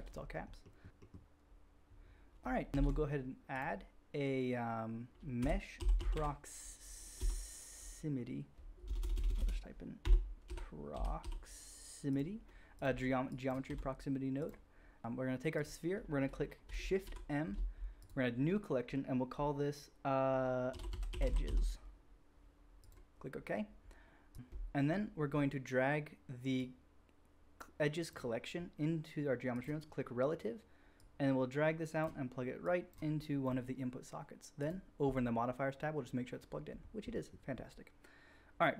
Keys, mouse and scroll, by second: 0.8 middle click, 2.7 shift+a, 9.0 BackSpace, 9.1 BackSpace, 9.3 BackSpace, 13.2-14.4 drag, 13.6 g, 14.4-15.5 middle drag, 15.0 shift+a, 15.5 click, 15.7 middle click, 17.2 shift+m, 26.5-28.1 drag, 28.1-29.5 middle drag, 29.5 click, 29.6-30.5 middle drag, 30.9-34.8 drag, 34.8-38.7 middle drag.